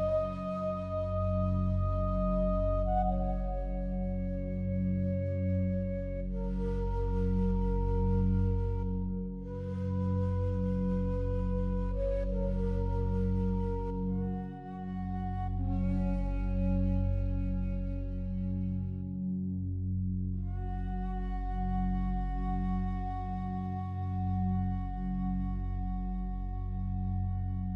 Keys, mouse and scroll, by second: 0.0 alt+click, 0.6-1.2 scroll down 1, 1.4-4.8 alt+drag, 4.8 scroll up 1, 5.8 alt+shift+click, 6.6 Tab, 8.6 ctrl+r, 17.1 right click, 19.9 alt+shift+right click, 20.8 a, 21.5 a, 23.3 2, 24.1 alt+shift+right click, 25.0 g, 27.2 g.